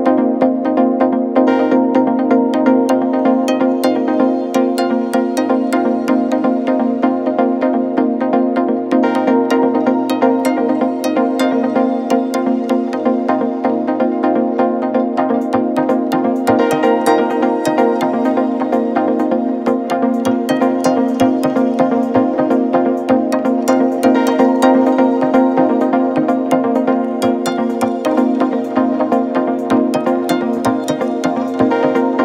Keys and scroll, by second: 2.7 Delete, 4.2 ], 6.2 4, 9.9 3, 10.2 ], 14.6 ], 16.2 ], 21.7 Return, 22.3 Escape, 25.3 Delete, 26.9 ], 29.3 ctrl+F1, 29.7 ctrl+F2.